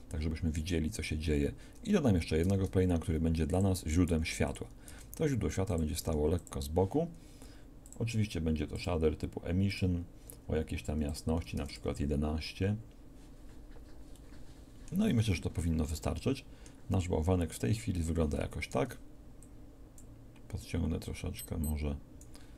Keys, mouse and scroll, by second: 2.4 shift+a, 4.1 s, 4.9 g, 6.1 r, 14.3 middle click.